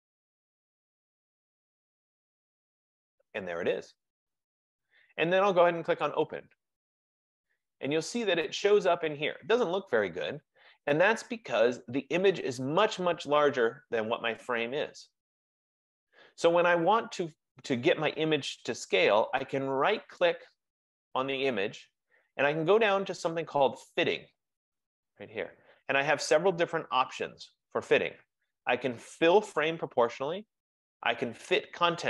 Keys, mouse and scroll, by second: 1.8 click, 2.1 click, 3.1 click, 11.8 F15, 20.3 right click.